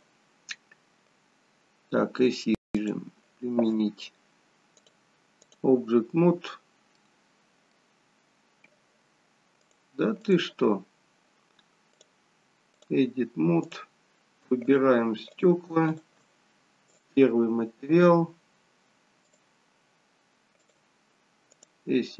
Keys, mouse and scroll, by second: 0.2-2.6 scroll down 2, 4.7 click, 6.4-7.0 scroll up 2, 7.0 middle click, 8.1-8.6 scroll up 1, 9.6 click, 14.6 click, 16.6 shift+click, 16.9 click.